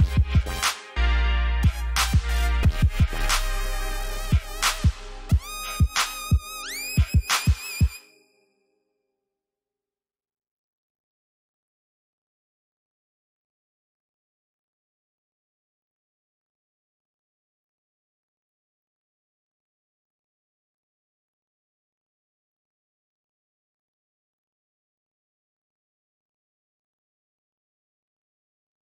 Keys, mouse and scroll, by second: 2.7 click, 4.5-6.3 typing, 8.7-9.5 scroll down 1, 10.0 click, 11.1 ctrl+shift+s, 12.6 click, 21.8-23.0 typing, 23.8 click, 26.5 alt+scroll down 1, 27.0-27.6 alt+scroll up 1, 27.7-28.9 scroll up 1.